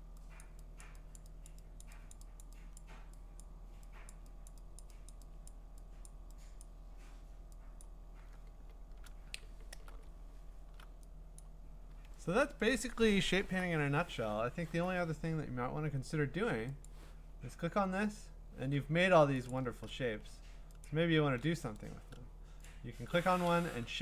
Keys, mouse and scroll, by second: 0.4 click, 0.8 click, 1.2 click, 1.5 click, 1.8 click, 2.1 click, 2.4 click, 2.8 click, 3.4 click, 4.1 click, 4.5 click, 4.8 click, 5.1 click, 5.5 click, 6.1 click, 6.6 click, 7.8 click, 9.1 scroll, 10.1-10.7 scroll, 11.4 click, 12.0-12.4 scroll, 16.9 click, 17.8-19.5 scroll, 19.5 click, 20.8 shift+click, 22.7 click.